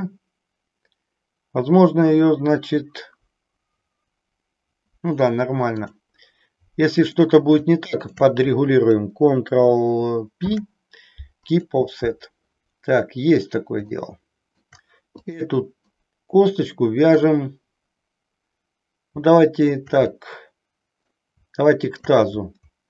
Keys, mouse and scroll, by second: 5.7 click, 6.9 click, 7.8 shift+click, 10.4 ctrl+p, 13.9 shift+middle click, 15.9-17.2 middle drag, 20.2-21.2 middle drag, 21.8 shift+click.